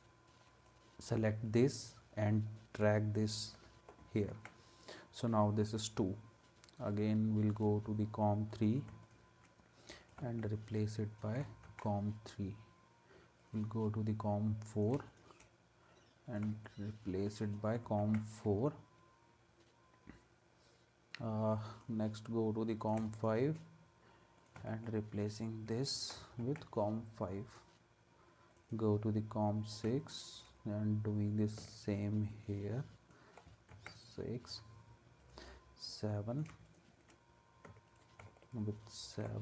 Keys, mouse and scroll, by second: 0.5 alt+click, 4.3 ctrl+s, 9.0 shift+click, 10.0 click, 10.4 alt+click, 11.6 ctrl+s, 15.1 shift+click, 16.6 alt+click, 18.0 ctrl+s, 26.4 ctrl+s, 30.0 shift+click, 31.7 alt+click, 33.7 ctrl+s, 36.7 shift+click, 37.9 alt+click, 38.4 alt+click.